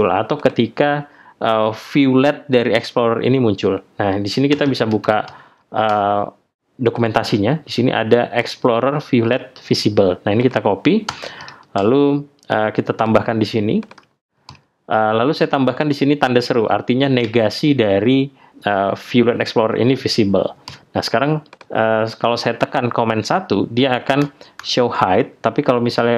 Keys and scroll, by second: 24.2 super+1.